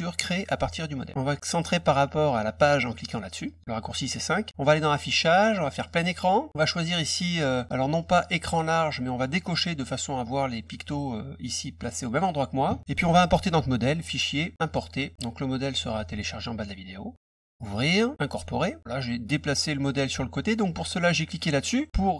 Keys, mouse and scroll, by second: 3.4 click, 4.6 click, 5.8 click, 7.4 click, 8.0 click, 9.4 click, 13.9 click, 14.6 click, 15.6 click, 17.5 click, 18.3 click.